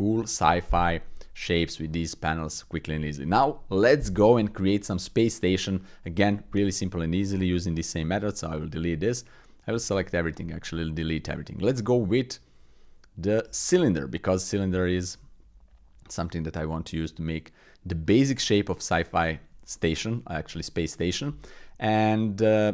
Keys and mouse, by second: 0.2 middle click, 0.9-1.4 middle drag, 1.9 middle click, 8.0 x, 9.5 middle click, 9.7 a, 9.9 x, 11.9 shift+a, 14.7 s, 19.0-19.4 shift+drag, 19.7 click.